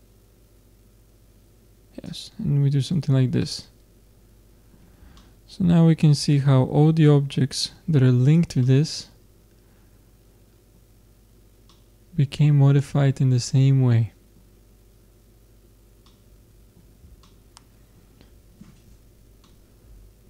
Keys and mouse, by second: 2.5-4.1 drag, 2.9 Tab, 8.3-10.1 middle drag, 11.1-13.5 middle drag, 14.5-16.1 middle drag, 16.2 middle click, 16.7-20.2 middle drag.